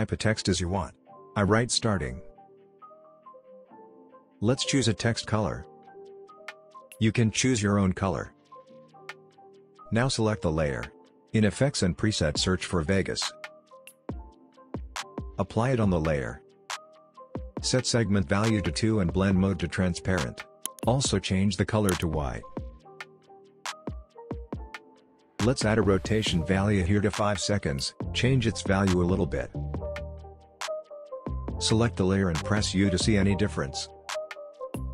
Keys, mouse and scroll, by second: 0.0-2.1 typing, 2.7-7.2 drag, 3.3 click, 5.1-5.8 click, 6.3-6.9 click, 8.2-9.1 scroll down 1, 9.1 click, 9.8-10.2 scroll up 1, 10.2 click, 13.4-14.6 typing, 14.5-16.1 drag, 17.2 click, 18.0 Return, 19.7 click, 20.7 scroll up 1, 21.0-27.0 drag, 25.9-27.0 drag, 30.4 scroll down 1, 30.5 click, 31.1 u.